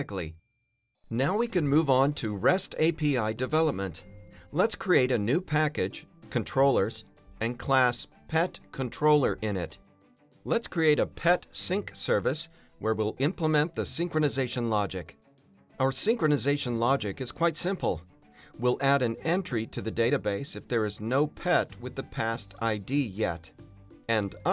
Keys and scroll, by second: 1.2 super+n, 9.9 Return, 13.0 Return, 14.4 Return, 15.2 Return, 16.6 alt+Return, 18.6 alt+shift+Left, 19.3 Return, 20.0 Return, 24.3 Return.